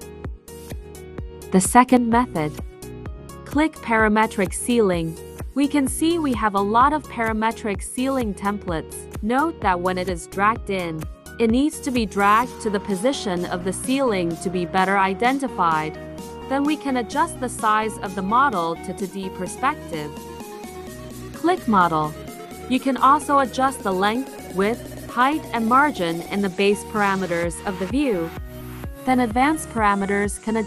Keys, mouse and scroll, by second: 1.4 click, 3.2 click, 11.5 click, 16.2 click, 17.1 click, 20.0 click, 21.7 click, 24.9 click, 26.0-27.0 typing.